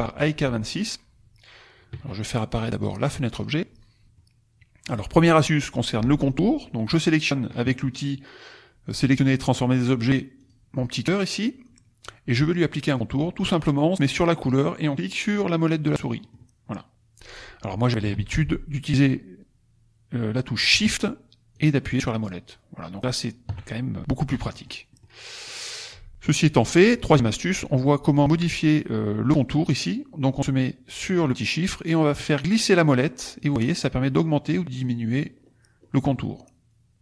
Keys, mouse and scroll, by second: 2.8 click, 3.3 click, 4.1-10.6 drag, 16.2 click, 18.1 ctrl+z, 21.5 shift+click, 22.2 shift+click, 24.4 click, 24.9 click, 25.4 click, 32.0-32.8 scroll up 2, 32.8-33.2 scroll up 1, 33.2-34.3 scroll down 2, 34.6-35.3 scroll down 4, 35.3-36.4 scroll up 6, 36.5-37.0 scroll down 2.